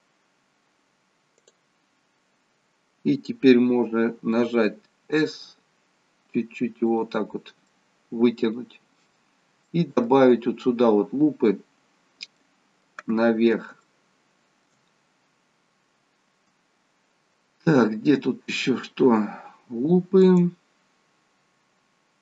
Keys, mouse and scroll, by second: 1.4 click, 5.1 s, 7.7 middle click, 9.7 middle click, 13.8 middle click, 13.9 shift+middle click, 14.9-16.9 scroll up 2, 17.9 scroll down 2, 18.4-18.8 scroll up 1, 20.3 click.